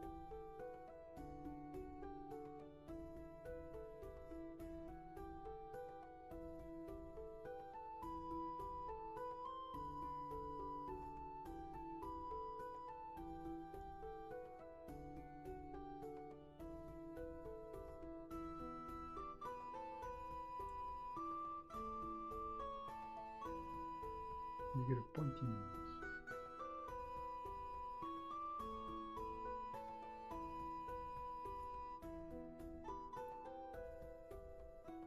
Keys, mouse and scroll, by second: 15.1 ctrl+z.